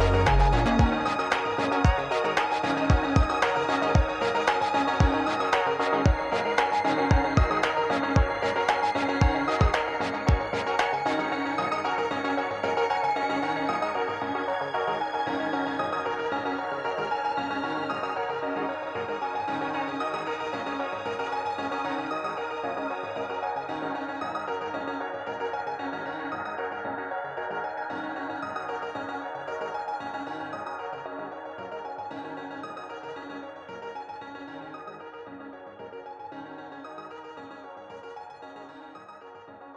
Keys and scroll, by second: 0.1 r, 1.6 KP_7, 2.5 ctrl+d, 2.8 ctrl+d, 3.2 ctrl+d, 5.2 shift+d, 8.5 g, 14.3 r, 14.9 shift+s, 23.8 ctrl+z, 24.0 ctrl+z, 24.2 ctrl+z, 26.7 ctrl+z, 31.4 ctrl+z, 31.5 ctrl+z, 32.0 ctrl+z.